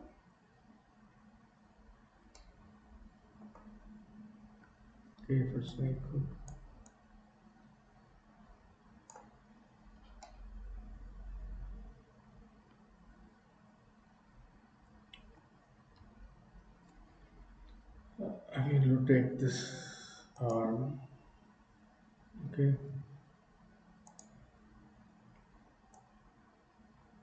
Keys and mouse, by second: 2.3-3.5 shift+middle drag, 5.7 click, 6.9-9.3 drag, 10.3-12.6 middle drag, 13.4-15.4 middle drag, 16.0 KP_3, 20.6 click, 26.5-27.2 drag.